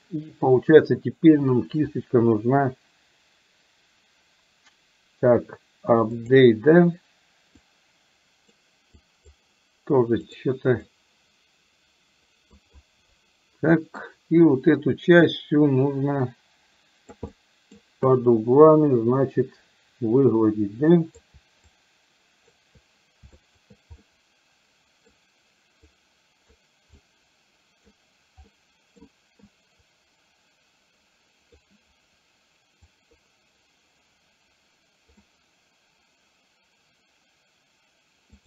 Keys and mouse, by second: 7.7 click, 9.1 click, 10.3 click, 10.8-12.7 drag, 13.8 middle click, 14.5-17.2 drag, 17.3 middle click, 18.1-21.2 drag, 21.8 shift+click, 23.5 shift+click, 24.1-25.1 middle drag, 26.0 click, 27.0-28.0 drag, 28.5 middle click, 29.5-31.6 drag, 33.0-35.2 drag.